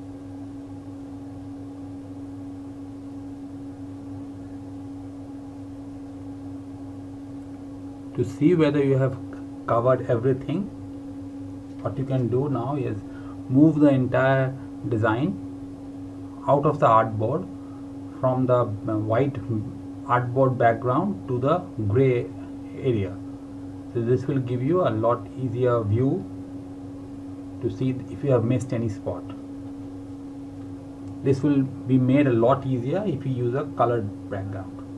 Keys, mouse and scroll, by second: 7.5 alt+Num_Lock, 8.7 scroll down 1, 9.1 click, 12.3 click, 16.6 click, 19.1 scroll down 1, 20.5 click, 23.1 click, 26.9 space, 27.2 scroll down 1, 27.3 scroll up 1, 27.5 scroll down 1, 28.0 click.